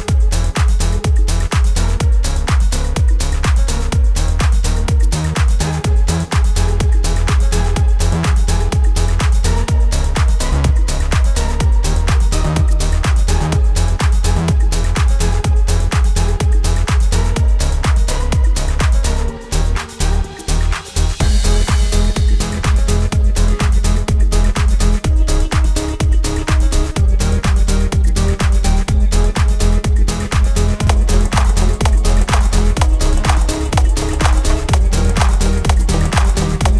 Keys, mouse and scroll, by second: 13.4 space, 13.8 click, 16.3-23.7 drag, 23.7 right click, 24.3 click, 27.8 click, 34.8 space.